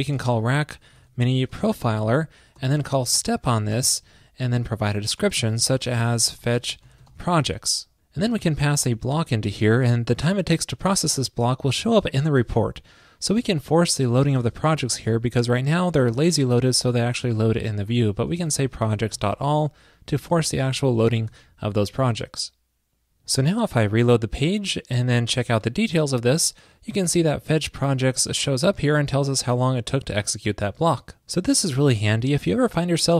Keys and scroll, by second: 21.4 super+s.